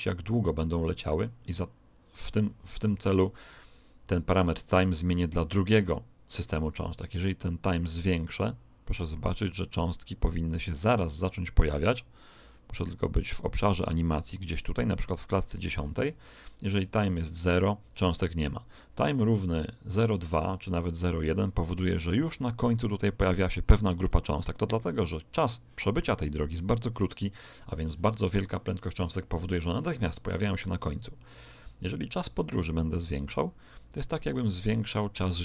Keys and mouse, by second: 7.1 click, 13.1 click, 16.5 click, 22.2-25.9 middle drag, 32.3 click.